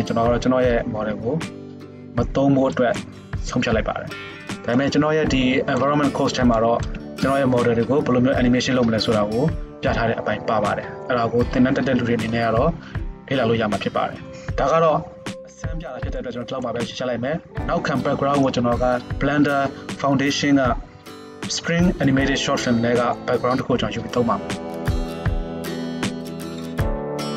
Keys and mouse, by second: 12.7-16.7 middle drag, 25.1 shift+Left.